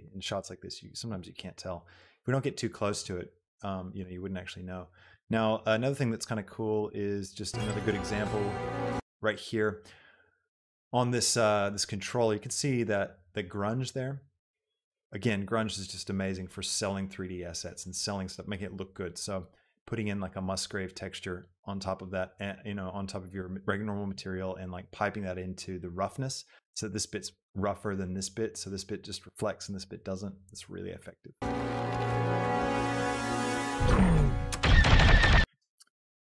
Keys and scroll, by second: 7.7 space, 31.5 space, 35.6 space.